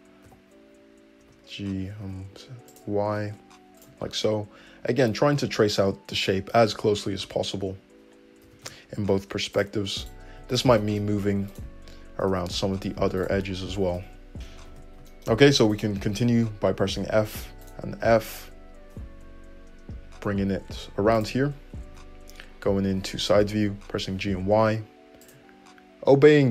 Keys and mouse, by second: 0.2 g, 3.5 shift+g, 3.6 shift+middle click, 6.8 `, 8.4 g, 10.0 click, 10.1 shift+middle click, 10.5 click, 10.6 shift+middle click, 11.5 shift+click, 11.5-15.7 shift+middle drag, 12.2 g, 13.7 g, 14.5 alt+`, 14.6 alt+z, 15.7 click, 15.8-17.6 middle drag, 16.7 f, 17.6 click, 17.7-21.2 middle drag, 19.2 f, 21.2-26.5 drag, 21.8 `, 23.2 g.